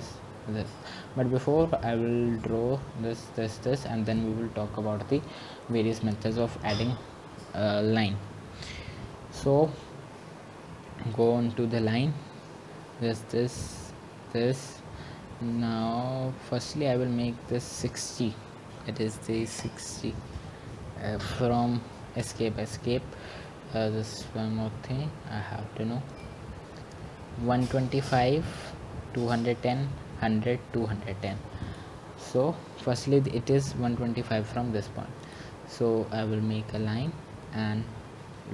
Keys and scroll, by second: 22.4-23.1 typing.